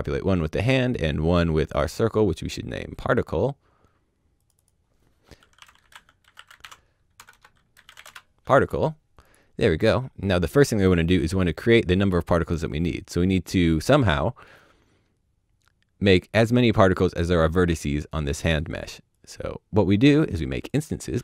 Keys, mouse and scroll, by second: 5.2 shift+click, 5.6-7.1 typing, 7.7 middle click, 8.0 Return, 9.2 click, 9.8-11.0 scroll down 1, 11.0 click, 17.4 click, 21.1 shift+Tab.